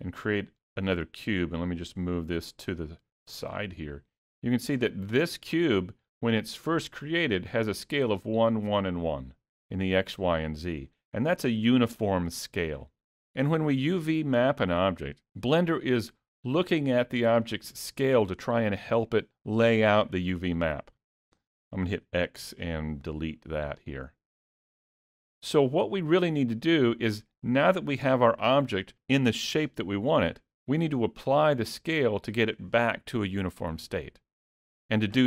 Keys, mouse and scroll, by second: 1.8 click, 3.5-4.4 scroll down 2, 4.4-4.8 scroll down 1, 22.0 x, 23.9-24.5 scroll up 1, 24.5 click, 24.5 scroll up 1.